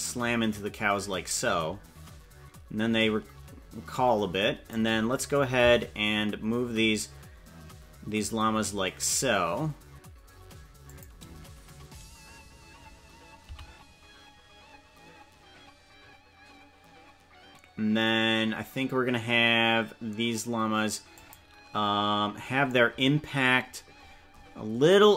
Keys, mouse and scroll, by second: 5.7 g, 13.4 g, 23.6-25.1 scroll up 17.